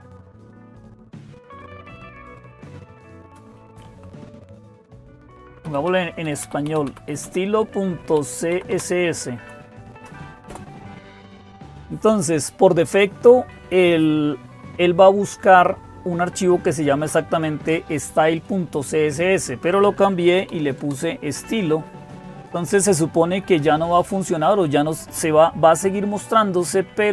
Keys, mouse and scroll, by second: 0.0-27.1 typing, 10.3 Return, 20.7 Return, 26.8 click.